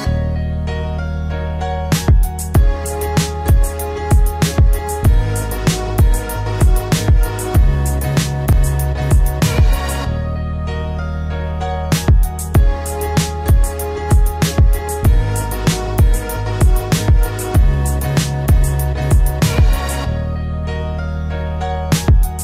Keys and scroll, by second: 12.5 ctrl+g, 16.0 ctrl+alt+shift+e.